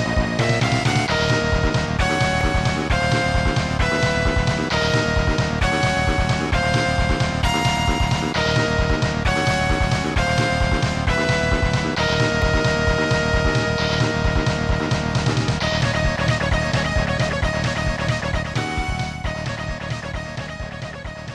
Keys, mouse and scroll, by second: 4.6 click, 7.5 click, 8.7 click, 10.7 s, 12.5-15.7 scroll down 1, 19.0 scroll down 1.